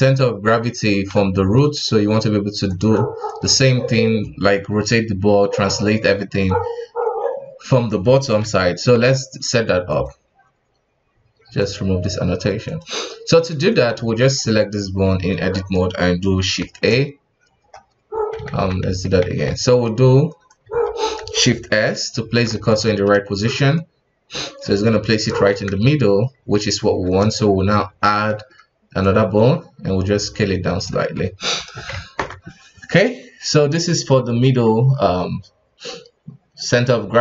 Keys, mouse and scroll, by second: 1.1-3.5 typing, 2.6 click, 3.3 drag, 8.4 n, 9.0 n, 9.9 click, 11.6 click, 12.8 click, 13.7 right click, 14.3 Tab, 14.9-15.5 scroll up 1, 15.5-16.6 shift+middle drag, 16.6 shift+a, 17.4-18.4 scroll up 2, 18.4 ctrl+z, 19.2 ctrl+z, 19.6 right click, 20.3 right click, 20.6 Tab, 21.7 shift+s, 22.8-25.2 shift+middle drag, 25.2 KP_1, 26.3-26.7 scroll up 1, 26.7 shift+a, 27.6-28.1 scroll down 1, 28.1-29.0 shift+middle drag, 29.0-31.0 drag, 31.0 Tab, 31.9 ctrl+Tab, 33.9 middle click, 34.9 KP_1.